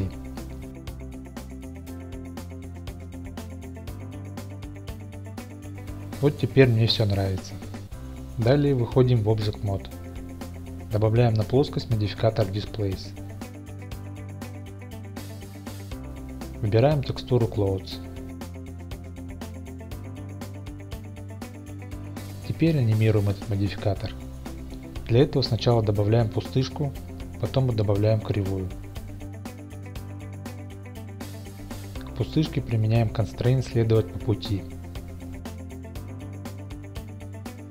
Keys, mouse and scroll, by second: 4.8 click, 8.4 Tab, 9.1-9.9 middle drag, 11.8 click, 12.6-15.4 drag, 17.1 click, 18.2 click, 19.8-20.8 drag, 21.9 shift+a, 26.4 shift+a, 31.9 click, 33.4 click, 34.4-37.5 drag.